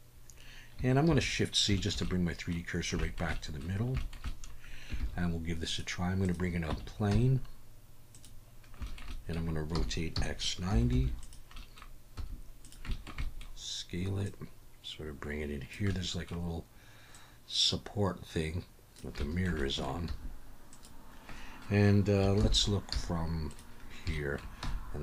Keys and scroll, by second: 1.1 shift+c, 5.0 shift+a, 6.7 Tab, 7.1 s, 9.7 r, 10.1 x, 10.7 9, 10.9 0, 12.2 s, 20.1 s, 22.4 ctrl+KP_1, 22.9 z, 24.6 g.